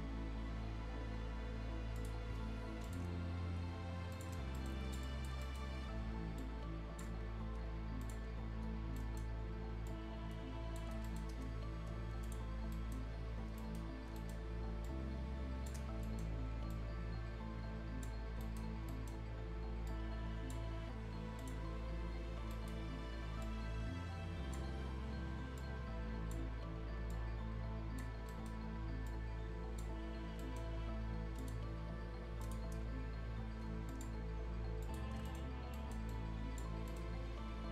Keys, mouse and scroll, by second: 2.0 shift+click, 2.3-2.7 shift+scroll down 1, 2.9 shift+click, 3.1 shift+scroll up 1, 4.1 shift+click, 4.4-4.9 shift+scroll down 2, 4.6 right click, 4.9 click, 5.4 right click, 5.7 scroll up 1, 6.4-8.0 shift+drag, 8.0 click, 8.3 scroll down 1, 8.6 scroll up 1, 9.0 right click, 9.3-9.9 scroll up 1, 9.9 click, 10.9 scroll up 1, 11.1 right click, 12.2 click, 12.6 scroll down 1, 12.7 right click, 13.9 scroll up 1, 14.2 right click, 14.9 shift+click, 16.0 scroll up 1, 16.0 right click, 16.7-18.3 drag, 18.3 scroll up 1, 18.4 right click, 18.7 scroll down 1, 18.9 right click, 19.2-19.9 scroll up 1, 19.9-21.4 drag, 21.7 scroll down 1, 22.5 right click, 22.8-23.1 scroll up 1, 23.4 click, 24.7 scroll up 1, 25.6 click, 26.5 scroll down 1, 26.7 scroll up 1, 27.1 click, 28.1 scroll down 1, 28.3 right click, 29.1 click, 29.9 scroll up 1, 30.4 right click, 30.7-31.4 scroll up 1, 31.4 click, 32.7 scroll up 1, 33.9 click, 34.8 click, 35.1 shift+scroll up 1, 35.3 right click, 36.1 click, 36.8 scroll up 1, 36.9 right click.